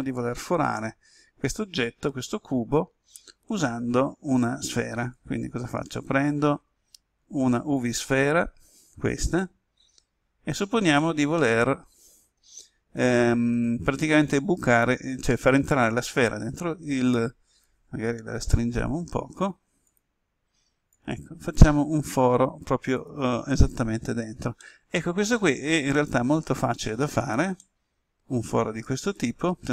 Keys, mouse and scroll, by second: 5.5 shift+a, 7.7-11.1 drag, 11.3 middle click, 14.1-18.1 drag, 18.3 s, 19.8-23.2 drag, 23.7-24.5 scroll up 1, 24.5 middle click, 25.5-27.5 scroll up 1, 27.5-29.7 middle drag.